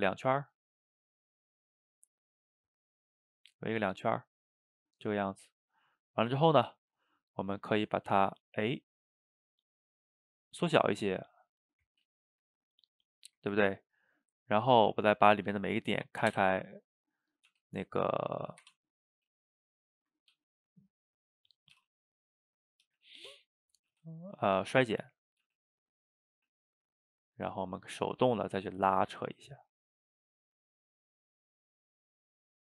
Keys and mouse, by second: 0.1-0.8 drag, 0.8-3.9 middle drag, 4.8-8.1 ctrl+middle drag, 8.1 s, 10.1-14.9 middle drag, 14.9 click, 16.3 o, 19.4 shift+click, 19.9 shift+click, 20.4 g, 21.6 click, 21.8 g, 22.7 click, 22.9 g, 23.8 click, 23.9 g, 25.3 click, 25.5 g, 26.2 click, 26.4 g, 27.3 click, 27.6 g, 28.5 click, 28.6 g, 29.3 click, 29.5 g, 30.3 click, 30.4 g, 31.4 click, 31.5 g, 32.1-32.7 middle drag.